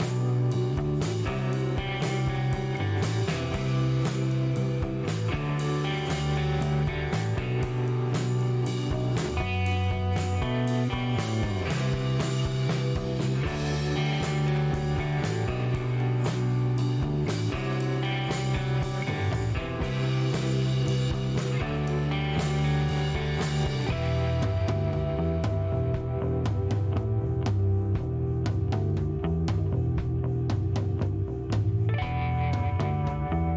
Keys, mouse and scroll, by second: 5.2 click, 8.7 click, 11.2 click, 13.2 click, 14.0 KP_6, 16.6 click, 17.5 scroll down 1, 18.0 middle click, 18.3 shift+right click, 19.0 shift+scroll down 1, 19.4 middle click, 21.6 click, 23.1 shift+right click, 23.8 shift+middle click, 24.8 click, 26.3 scroll up 1, 26.8 scroll up 1, 28.7 click, 29.3 click, 30.4 scroll down 2, 31.0 middle click.